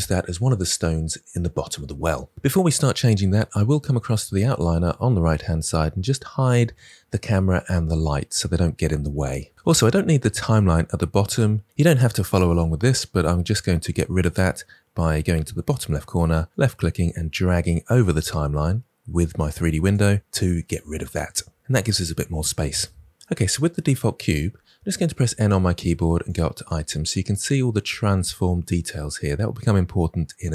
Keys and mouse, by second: 6.4 click, 7.8-9.1 drag, 16.5 click, 25.1 n.